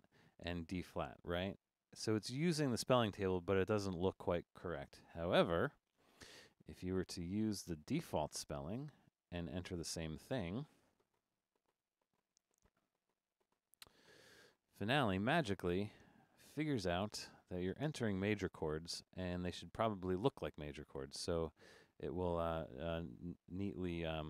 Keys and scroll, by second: 5.1 BackSpace, 18.1 Escape.